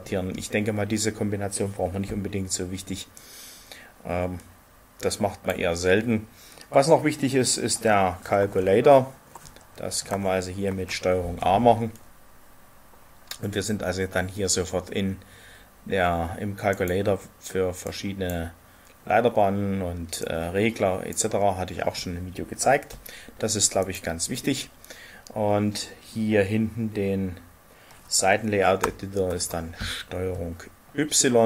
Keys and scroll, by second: 10.6 ctrl+shift+a, 29.3 ctrl+y.